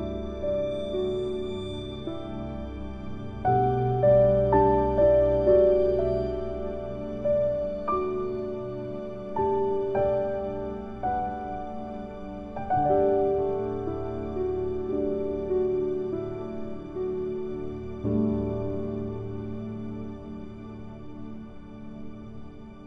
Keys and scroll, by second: 14.1 ctrl+End.